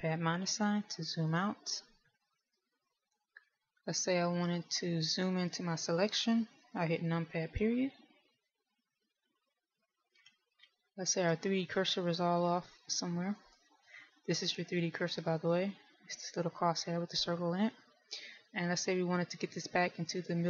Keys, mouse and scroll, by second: 1.7 KP_Subtract, 2.2 KP_Subtract, 3.1 KP_Subtract, 3.5 KP_Subtract, 4.7 shift+middle click, 8.7 KP_Decimal, 11.0-13.1 scroll down 4, 13.1 scroll down 1, 14.3 click.